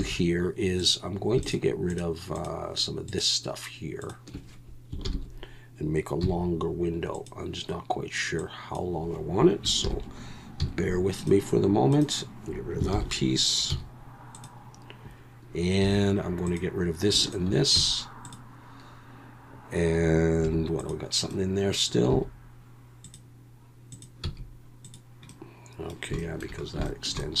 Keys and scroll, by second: 0.0 3, 5.0 ctrl+l, 6.2 x, 9.8 ctrl+l, 10.6 x, 12.9 ctrl+l, 13.7 x, 15.8 3, 17.8 x, 20.4 2, 22.1 x, 24.2 x.